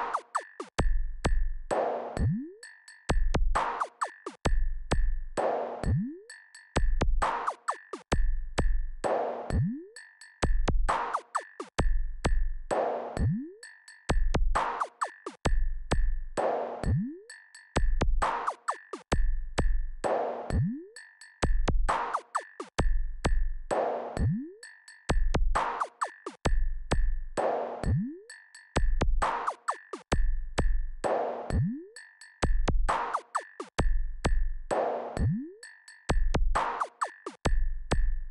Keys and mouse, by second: 5.3 click, 6.5 click, 8.5-12.9 drag, 24.1-26.2 drag, 27.7 click, 30.0 click, 31.8 click, 37.0-38.3 drag.